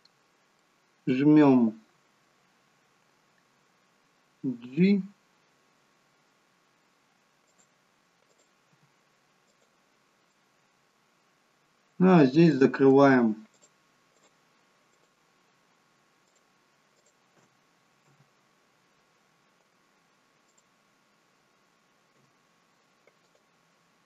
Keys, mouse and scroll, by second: 0.5 middle click, 4.5 g, 8.4 click, 8.7 g, 10.3 middle click, 11.1-11.7 scroll up 2, 12.5 click, 13.5 shift+click, 14.2 shift+click, 15.0 shift+click, 16.3 shift+click, 17.0 shift+click, 18.1 f, 20.5 click, 22.1 Delete.